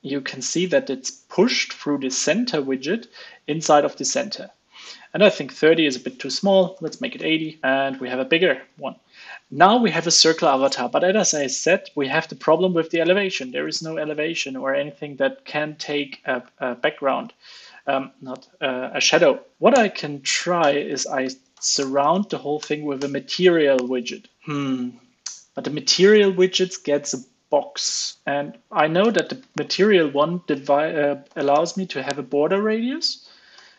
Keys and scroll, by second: 11.5 super+Right, 12.4 ctrl+space, 16.7 super+s, 19.7 alt+Return, 23.3 super+s, 24.0 super+s, 28.8 super+Right, 33.5 alt+BackSpace.